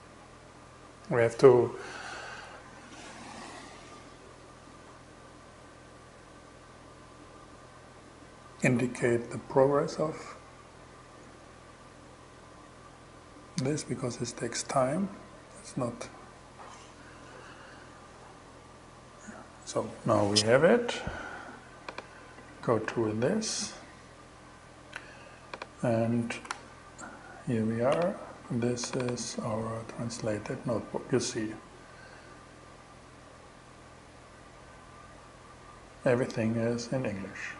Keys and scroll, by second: 22.3 shift+Return, 25.9 shift+Return.